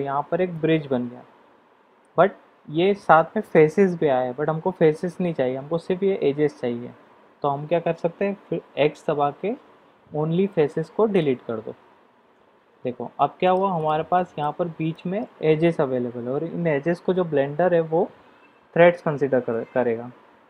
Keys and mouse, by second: 0.6-2.0 middle drag, 8.8 x, 12.7 Tab, 13.1-13.6 middle drag, 13.8 drag, 14.1 middle drag, 14.9 middle click, 19.5-20.4 middle drag.